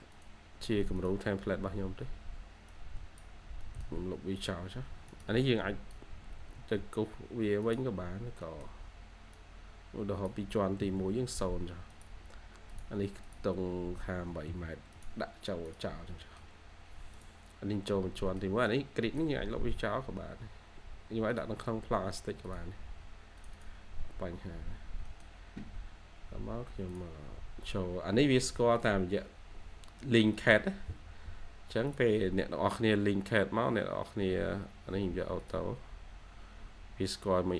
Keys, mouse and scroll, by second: 0.9 double click, 2.0-3.5 scroll up 1, 3.4-5.4 typing, 3.5 middle click, 4.4 scroll, 4.5 scroll up 1, 5.3 double click, 6.5-7.2 typing, 8.3 middle click, 8.8-9.8 scroll up 1, 10.7-11.4 typing, 15.8 scroll, 15.9 scroll down 1, 16.1 middle click, 17.8-18.2 scroll down 1, 18.2 middle click, 19.4-20.2 typing, 23.4 double click, 24.4-25.0 scroll down 1, 25.0 middle click.